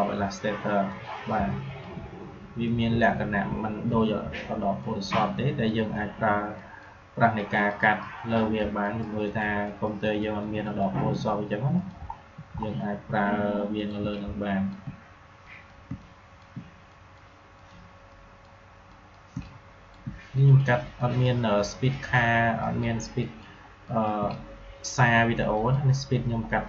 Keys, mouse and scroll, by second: 3.0 alt+scroll down 1, 3.4 alt+scroll up 1, 4.7 click, 8.8 click, 12.0 alt+scroll down 1, 12.5 alt+scroll up 1, 13.7 click, 14.0 space, 14.0 click, 14.4 space, 15.4 click, 15.8 space, 15.9 click, 16.2 space, 16.8 click, 17.5 click, 19.2 space, 19.3 click, 19.7 space, 20.3 click, 24.1 space, 24.2 click, 24.6 space, 25.5 click.